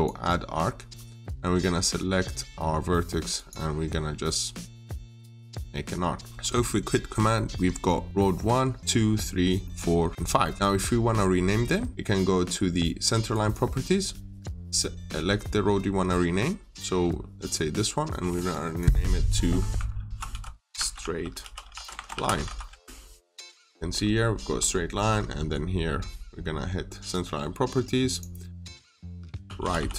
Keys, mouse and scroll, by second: 0.6-2.5 scroll up 1, 3.2 click, 6.2 scroll down 1, 6.5 middle click, 7.4 scroll down 1, 8.8-9.5 scroll up 1, 9.5 middle click, 10.1-10.4 scroll down 1, 10.4 middle click, 10.6-12.8 scroll up 1, 13.2 click, 19.6-22.8 typing, 23.0 Return, 23.4-24.1 scroll up 1, 24.4-24.8 scroll down 1, 24.8 middle click, 26.9 click, 28.7-29.9 typing.